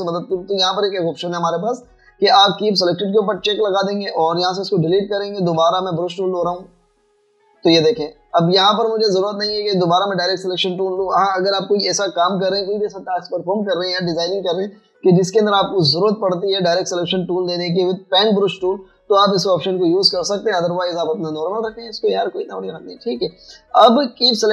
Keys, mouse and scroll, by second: 2.6 double click, 5.0 typing, 7.0 typing, 22.6 double click.